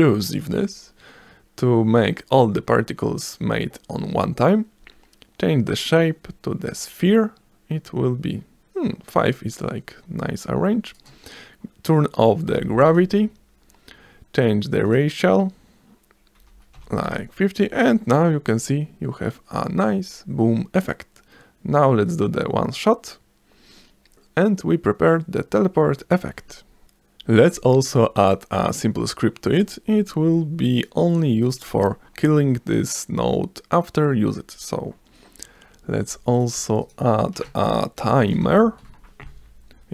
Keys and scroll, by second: 12.6 0, 12.9 Return, 16.4 5, 16.8 0, 17.1 Return, 37.8-39.0 typing.